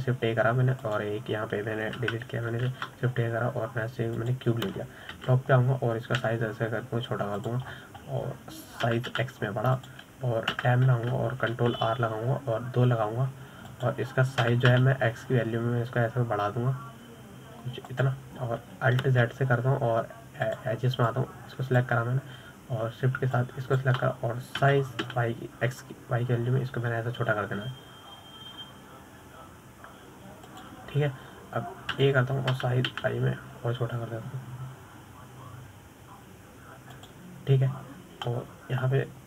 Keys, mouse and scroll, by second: 2.1 shift+a, 4.4 Delete, 5.1 shift+a, 7.5 KP_7, 8.7 s, 10.1-10.6 scroll up 10, 11.2 s, 13.0 Tab, 13.9 ctrl+r, 21.5 alt+z, 22.8 click, 25.7 shift+click, 27.0 s, 34.9 s.